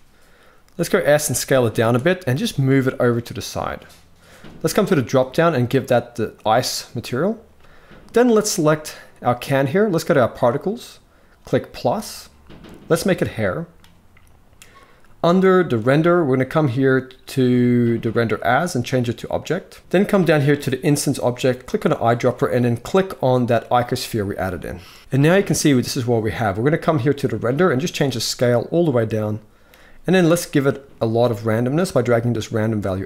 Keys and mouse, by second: 0.4 s, 2.0 g, 4.7-6.2 drag, 10.0 click, 12.8-15.7 drag, 17.9-19.1 drag, 21.4 click, 24.1-24.6 shift+middle drag, 27.8-29.4 shift+drag, 30.1-31.4 shift+drag.